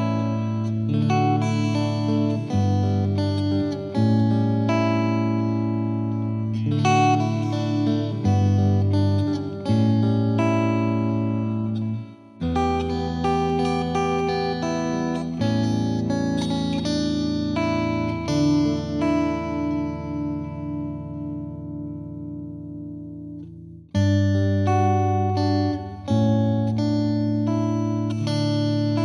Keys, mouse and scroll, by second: 4.0 space, 4.6-5.9 drag, 8.3 click, 8.5 shift+d, 11.5-12.9 drag, 13.9-16.4 drag, 16.4 g, 27.1-28.4 right drag, 28.4-28.9 drag, 28.9 space.